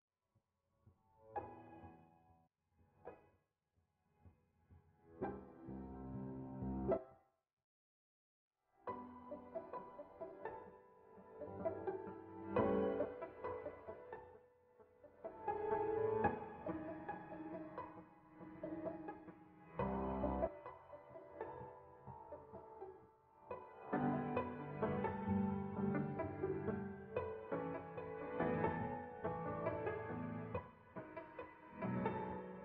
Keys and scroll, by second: 1.4 Escape, 6.4 Escape, 11.9-16.0 typing, 16.9 Escape, 21.0 Escape, 28.2 5, 28.3 Return.